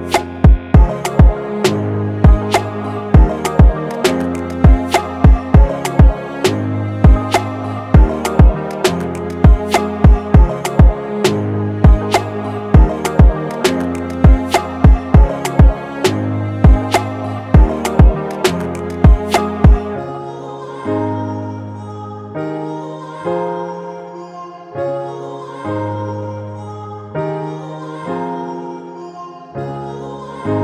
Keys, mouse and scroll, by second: 0.0-0.8 typing, 2.0 typing, 2.4 double click, 3.1-4.2 typing, 3.8 double click, 5.3-6.1 typing.